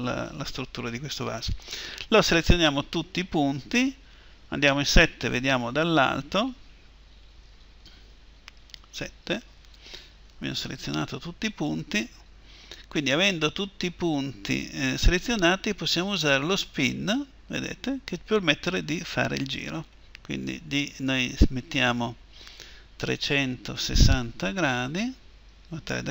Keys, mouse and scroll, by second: 2.0 a, 2.3 a, 5.1 7, 8.5 KP_7, 10.6 a, 10.9 a, 16.6-20.6 drag, 22.2-24.1 drag.